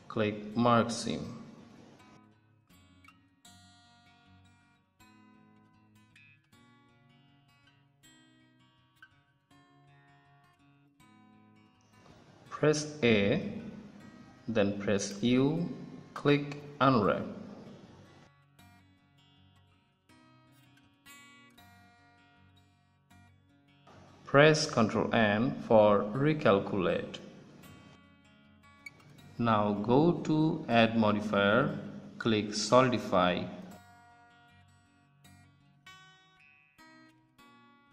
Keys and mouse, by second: 1.7 a, 3.5 click, 5.7-9.1 drag, 11.3-12.7 middle drag, 12.7 a, 14.5 u, 17.6 click, 19.5 Tab, 19.5 ctrl+s, 21.2 Tab, 21.7 Tab, 26.1 ctrl+n, 26.9 Tab, 29.3-32.4 drag, 36.0-37.6 drag.